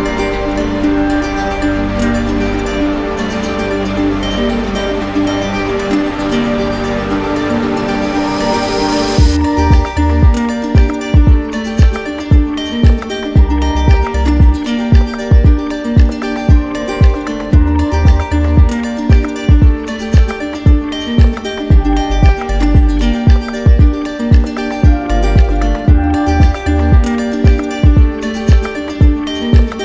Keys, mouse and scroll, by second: 1.6-2.7 right drag, 3.0-4.0 drag, 6.6 click, 11.8 click, 13.5 click, 14.2 click, 15.4 ctrl+click, 15.5 ctrl+click, 16.5 click, 18.0 click, 22.7 click, 23.4 click, 24.1 alt+click, 24.2 right click, 27.5 click, 28.3 click.